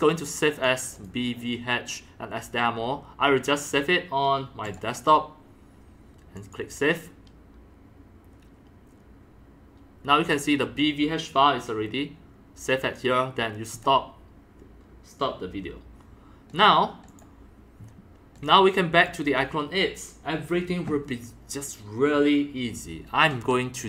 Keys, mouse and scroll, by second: 0.5 click, 0.9 click, 4.6 click, 6.4 click, 10.3 click, 11.2-13.7 drag, 13.7 click, 16.5 click, 17.0 click, 18.4 click, 18.7 click, 19.0 click, 20.3-23.8 drag.